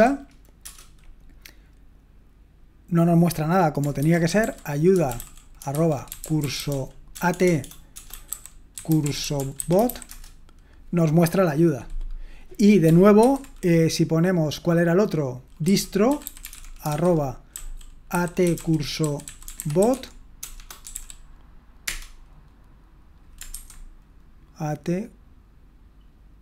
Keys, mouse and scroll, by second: 0.0-0.4 typing, 0.6 Return, 4.2-10.4 typing, 15.8-21.4 typing, 21.8 Return.